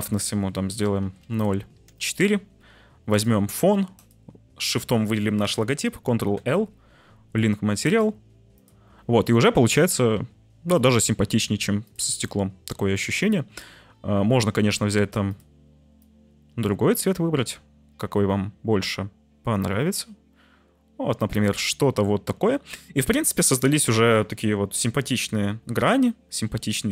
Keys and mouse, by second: 1.2 BackSpace, 3.1 click, 4.0 shift+click, 6.3 ctrl+l, 10.8 right click.